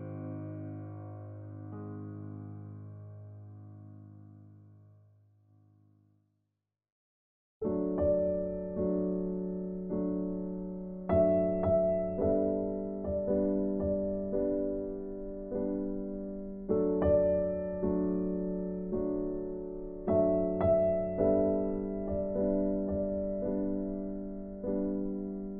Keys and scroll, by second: 2.2 ctrl+t.